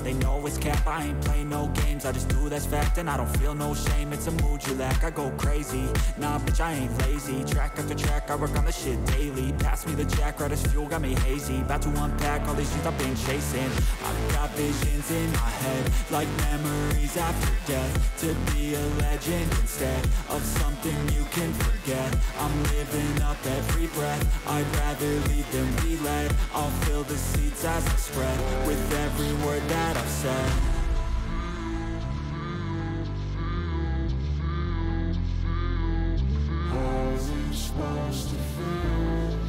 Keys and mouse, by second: 2.9-4.1 drag, 6.8 click, 7.6 alt+click, 8.0 alt+shift+click, 8.5 alt+shift+click, 9.3 alt+shift+click, 11.5 click, 14.0 click, 15.7-16.9 drag, 19.9 alt+click, 21.4 alt+shift+click, 23.1 click, 25.3 click, 27.2-28.2 drag, 30.2 alt+click, 31.6 alt+shift+click, 33.9-35.3 drag, 38.1 click.